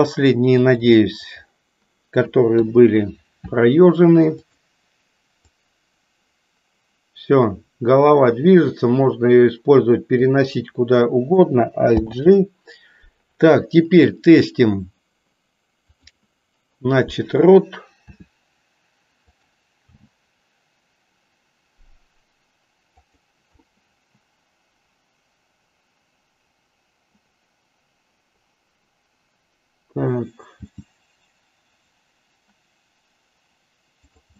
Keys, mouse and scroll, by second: 0.7 click, 2.6 KP_3, 4.4 click, 5.4-10.4 drag, 11.9 alt+g, 15.8 click, 18.2 r, 19.9 g, 23.7-30.1 middle drag, 30.7 g.